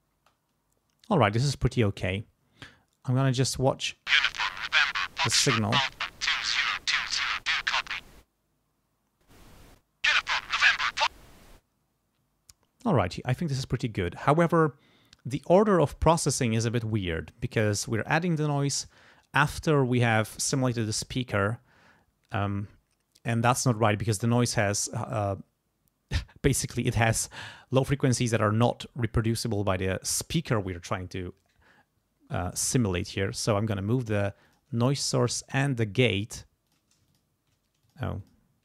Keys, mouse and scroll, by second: 0.2 space, 3.8 space, 6.2-10.7 drag, 11.1 space, 11.4 click, 34.5 click, 35.2 ctrl+click, 36.7 click, 37.0 Caps_Lock, 37.1 click, 37.8 shift+click, 38.2 shift+click.